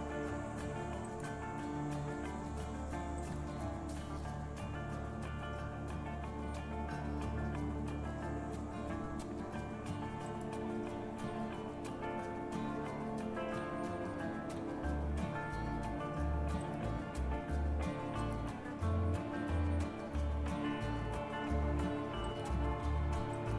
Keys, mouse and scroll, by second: 16.6-18.5 drag.